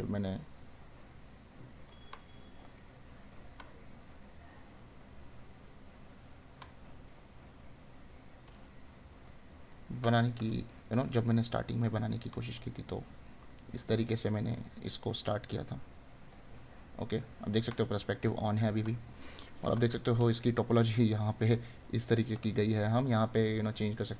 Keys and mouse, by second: 1.7 right click, 6.7 right click, 9.7 right click, 14.9 right click, 17.4 right click, 20.1 right click, 22.2 right click.